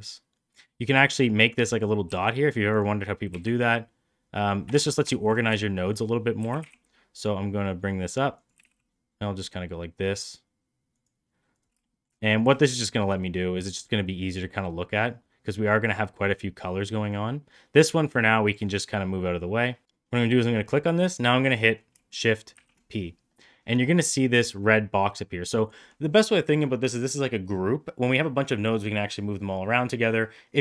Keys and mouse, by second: 1.6 click, 2.0 g, 3.2 g, 5.0 shift+middle click, 5.5 shift+middle click, 6.3 g, 8.4 g, 11.8 shift+middle click, 12.5 shift+middle click, 16.1 click, 17.8 click, 19.8 ctrl+z, 22.4 shift+p.